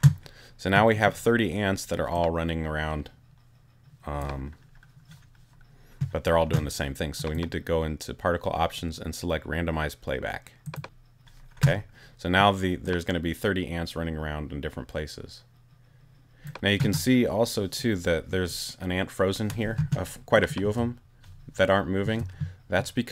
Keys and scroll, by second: 20.6 space, 22.0 space.